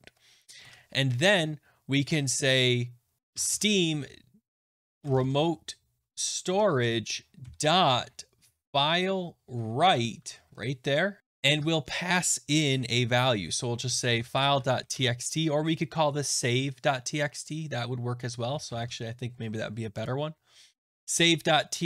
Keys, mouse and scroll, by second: 0.5 ;, 0.5 Return, 2.9-5.7 typing, 6.4 Down, 6.7 Return, 7.1-9.1 typing, 9.7 Left, 10.1 Down, 10.4 Return, 10.9-11.9 typing, 13.5-15.3 typing, 18.1 click, 18.2-19.2 typing, 20.0 click.